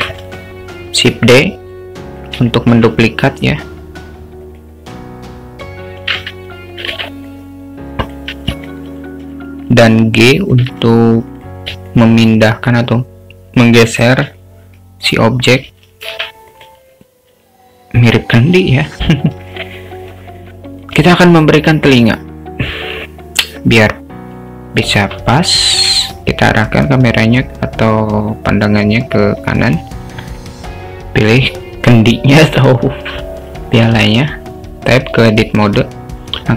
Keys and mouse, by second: 0.0 shift+d, 2.5 alt+shift+middle click, 3.1 s, 6.1 alt+z, 6.9 alt+z, 7.2-8.3 drag, 8.5 alt+z, 9.3 s, 10.8 alt+z, 11.2 click, 12.0-13.8 alt+middle drag, 14.4-15.1 middle drag, 15.2 alt+middle drag, 34.0 Tab, 35.8 1.